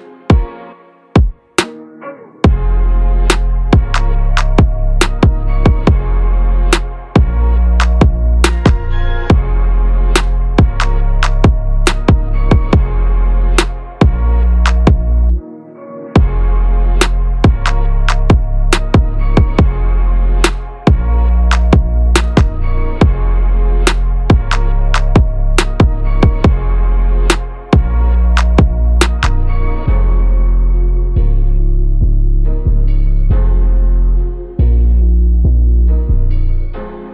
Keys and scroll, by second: 0.8 Down, 7.5 BackSpace, 15.2 ctrl+z, 24.7 ctrl+z.